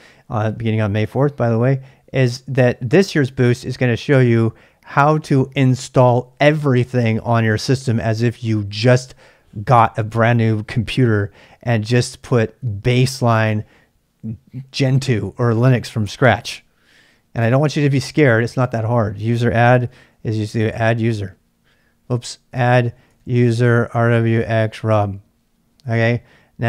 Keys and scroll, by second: 19.6-25.4 typing.